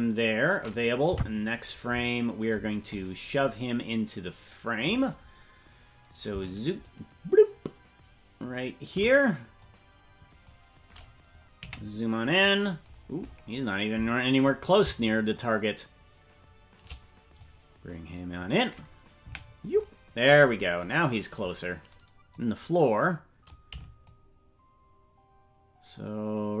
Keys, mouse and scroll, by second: 1.1 Right, 2.5-5.2 scroll down 18, 5.2-6.8 scroll down 1, 6.8-8.9 shift+drag, 6.8-8.5 scroll down 1, 9.5 click, 12.1-12.9 scroll down 3, 12.9-13.9 scroll down 1, 13.9-15.3 scroll down 7, 15.3-16.8 shift+drag, 17.3-18.3 drag, 19.1 KP_Decimal, 20.2-22.2 scroll down 6, 22.2-23.4 drag, 24.0-26.6 shift+drag.